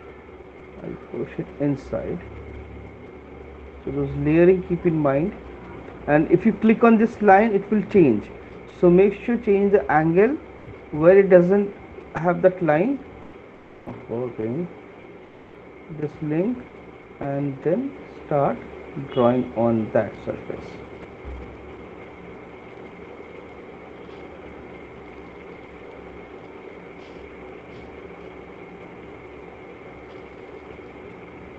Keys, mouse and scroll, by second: 1.4 click, 4.3 right click, 4.9 click, 6.9 right click, 13.9 ctrl+z, 20.4 click, 24.5 shift+click, 25.5 click, 30.4 click.